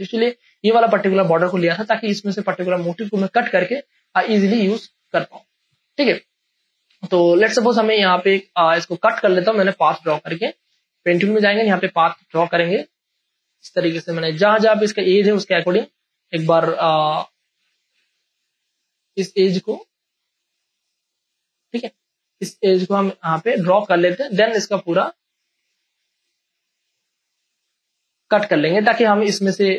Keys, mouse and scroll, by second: 0.4 space, 0.6 ctrl+click, 5.3 space, 5.6 click, 7.6 ctrl+space, 7.9 ctrl+click, 8.6 space, 8.9 ctrl+click, 9.6 p, 10.1 ctrl+space, 10.3 ctrl+click, 15.7 ctrl+alt+z, 16.9-19.4 drag, 19.4-21.2 drag, 22.1-23.9 ctrl+drag, 23.9 ctrl+space, 24.1 ctrl+click, 24.4 click, 24.8 space, 25.0 ctrl+click, 26.2-28.3 drag, 28.3-29.7 drag.